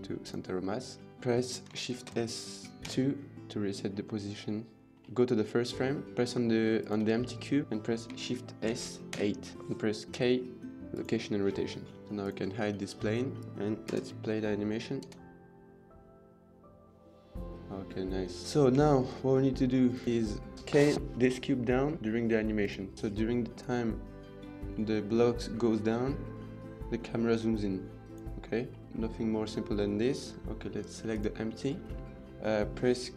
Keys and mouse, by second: 0.5 middle drag, 1.8 shift+s, 3.8-4.8 middle drag, 5.5 middle click, 6.6 click, 7.2 middle click, 8.5 shift+s, 10.0 k, 12.0 click, 13.2 click, 13.7 KP_0, 14.9 space, 18.4 ctrl+s, 18.7 shift+middle click, 19.8 click, 22.5 click, 23.3 click, 28.5-28.8 middle drag, 30.9 click, 32.0-32.4 middle drag.